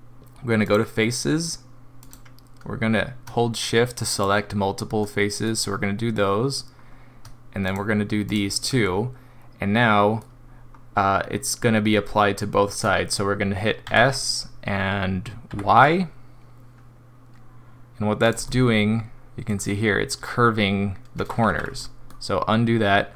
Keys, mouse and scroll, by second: 0.6 click, 2.0 click, 4.1 shift+click, 5.5 middle click, 6.7-7.1 scroll down 1, 7.7 shift+click, 8.3 shift+click, 8.8 middle click, 9.8 middle click, 10.4 scroll up 1, 13.9 s, 18.5 middle click, 19.7 scroll down 1, 21.5 ctrl+z, 21.8 middle click, 22.4 scroll up 2.